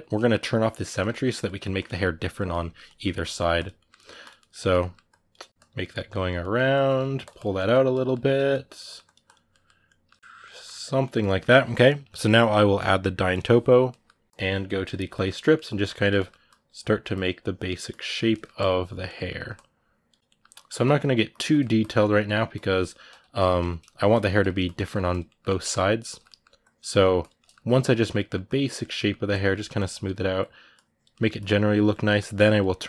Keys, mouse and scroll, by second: 1.5 click, 2.3 middle click, 3.1 click, 3.5 ctrl+middle click, 4.0 click, 4.1 ctrl+middle click, 4.8 click, 5.4 middle click, 5.5 click, 5.6-7.0 middle drag, 7.0 click, 7.3-8.8 middle drag, 8.8 click, 9.3-14.3 middle drag, 14.3 f, 14.7 click, 14.9 shift+middle click, 15.6 click, 15.7 ctrl+middle click, 16.2 click, 16.6 middle click, 16.9 click, 17.4 middle click, 17.6 click, 17.9 ctrl+middle click, 18.3 click, 18.9 ctrl+middle click, 19.3 click, 20.0 ctrl+middle click, 20.3 ctrl+click, 20.5 ctrl+middle click, 21.1 ctrl+click, 21.3 middle click, 21.6 ctrl+click, 21.8 ctrl+middle click, 22.3 ctrl+click, 23.2 ctrl+middle click, 23.9 ctrl+click, 24.1 middle click, 24.4 ctrl+click, 24.6 middle click, 24.9 click, 25.0-26.4 middle drag, 26.4 click, 26.6 middle click, 27.0 click, 27.2 ctrl+middle click, 27.4 click, 27.9 middle click, 28.2 click, 28.5 middle click, 29.1 click, 29.3 middle click, 29.5-30.9 drag, 30.9 middle click, 31.1 click, 31.8 middle click, 32.2 click, 32.5-32.8 ctrl+middle drag.